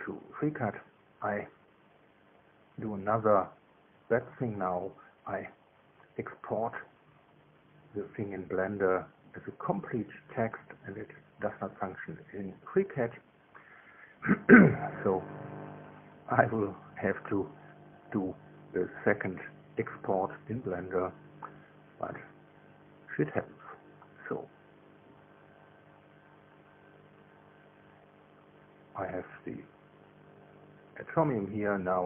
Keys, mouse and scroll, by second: 1.0 KP_1, 9.1 click, 10.9 scroll up 1, 12.8-14.0 middle drag, 14.0-16.0 scroll up 1, 16.0-16.4 scroll up 1, 16.0 KP_7, 16.4-18.0 drag, 16.4 KP_1, 17.8 KP_9, 19.2 KP_2.